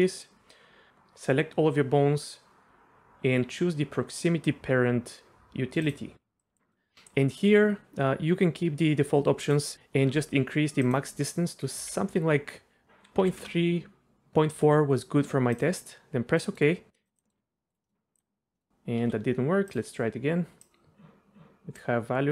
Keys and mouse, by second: 0.0 middle click, 0.9 a, 5.8-16.4 drag, 17.2 middle click, 17.4 r, 17.8 middle click, 18.1-18.6 drag, 18.6 middle click, 19.0 a, 19.7-22.3 drag.